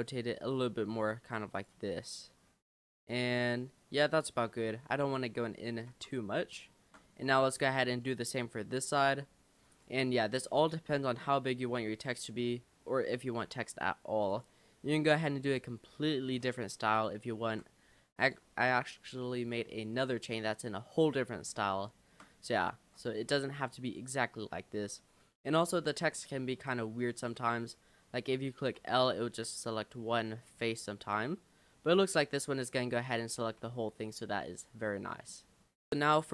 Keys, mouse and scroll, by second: 1.1 g, 1.9-4.3 middle drag, 4.3-4.8 scroll down 3, 4.8 shift+middle click, 5.7 scroll down 4, 5.9 Tab, 6.8 shift+middle click, 7.1 Tab, 7.3-8.1 scroll up 6, 8.1 click, 8.6 l, 9.1 l, 9.7 click, 10.1 scroll down 2, 10.4-11.0 scroll up 1, 11.0 scroll up 2, 11.7 scroll down 3, 12.5 r, 13.5 g, 15.1 click, 15.5 l, 16.3 r, 17.5 g, 18.5 Tab, 18.8 click, 19.2-19.7 scroll down 10, 19.9-20.7 middle drag, 20.7-21.1 scroll up 2, 21.2 middle click, 21.6 scroll up 1, 21.9 shift+middle click, 22.5 click, 22.8 Tab, 23.0-23.7 scroll up 4, 25.6 click, 26.3 middle click, 26.7-27.0 scroll down 3, 27.2 click, 27.7-28.4 scroll up 2, 28.4-28.8 scroll up 1, 28.8 l, 29.3-30.6 middle drag, 30.6-31.0 scroll up 5, 31.3-32.5 middle drag, 32.5-33.0 scroll down 4, 33.0 l, 33.3 l, 33.6 l, 34.0-35.4 middle drag, 35.4-36.3 scroll down 4.